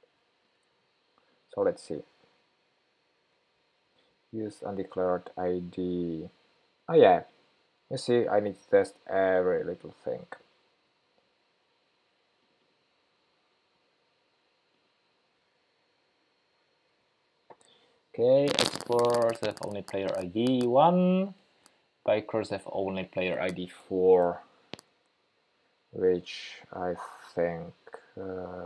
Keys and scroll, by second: 2.5 shift+super+p, 8.0 super+c, 10.8 super+v.